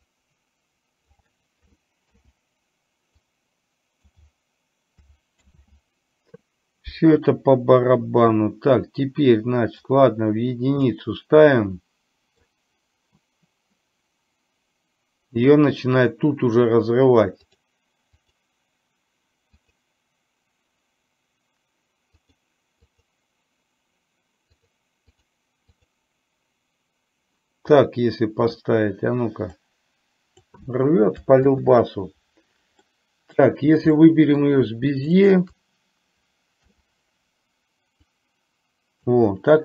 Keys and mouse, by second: 3.3-4.3 drag, 5.6 ctrl+z, 9.9-10.9 drag, 11.6-12.4 middle drag, 17.6 click, 19.7 click, 22.3 click, 22.9 click, 25.8 click, 27.9 middle click, 29.9 click, 32.9-33.4 middle drag, 33.9-34.4 middle drag, 35.2 shift+click, 38.3 click.